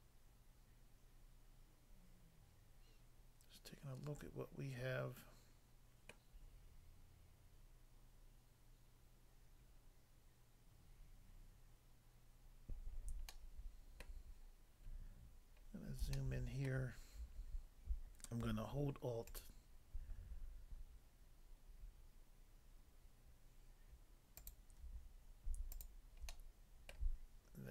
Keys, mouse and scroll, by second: 6.1 middle click, 11.5 scroll up 1, 12.3 scroll up 1, 13.3 shift+middle click, 14.8 scroll up 1, 15.6 scroll up 1, 16.1 shift+middle click, 19.3 alt+click, 19.4 alt+click, 25.7 shift+click, 26.3 middle click, 26.9 middle click.